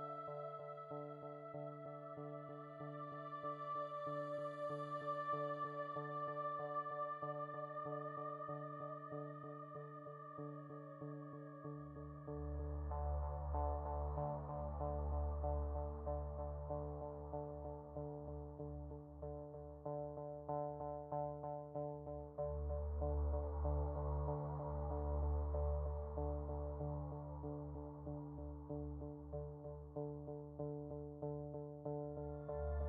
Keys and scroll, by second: 20.3 space, 21.6 space, 23.7 space, 27.8 space.